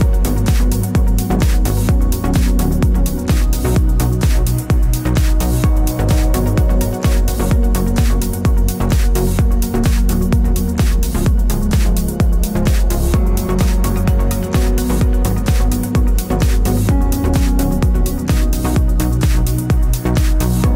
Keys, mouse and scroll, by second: 0.7 click, 0.9 g, 1.7-7.3 middle drag, 3.6-4.0 scroll down 2, 5.5 Tab, 7.3 click, 7.6 click, 8.2 alt+d, 10.2 r, 11.4 click, 11.7-12.8 middle drag, 12.8 click, 13.4 g, 14.0 s, 14.6 click, 15.0 s, 16.0 click, 16.5 g, 17.2 a, 17.8 click, 18.1 click, 18.5 s, 19.5 click, 20.0 shift+Tab, 20.6 g.